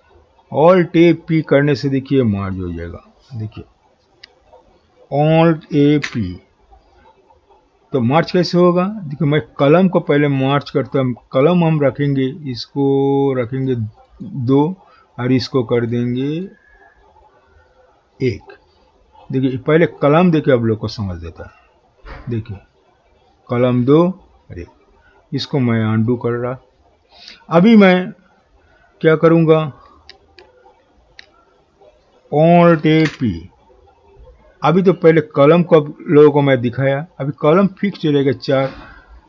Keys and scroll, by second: 5.6 alt+a, 6.0 typing, 32.7 alt+a, 33.1 typing.